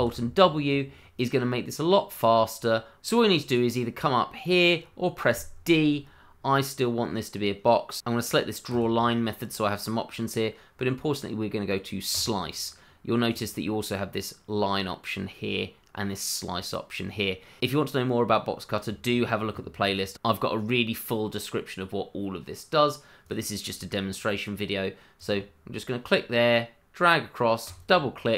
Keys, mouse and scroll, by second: 8.7 click, 12.1 click, 17.5 middle click, 21.9-23.2 scroll up 1, 23.2 click, 27.9 double click.